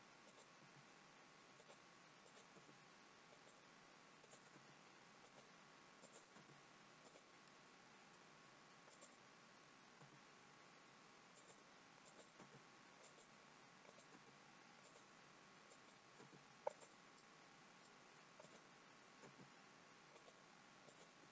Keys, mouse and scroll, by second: 0.3 click, 0.6 g, 2.4 click, 2.6 g, 4.3 click, 4.7 g, 6.1 click, 6.5 g, 7.6 middle click, 9.0 click, 10.2 g, 12.3 click, 12.5 g, 13.9 click, 14.3 g, 15.8 click, 16.2 g, 17.3 middle click, 18.5 click, 19.2 g, 21.0 click.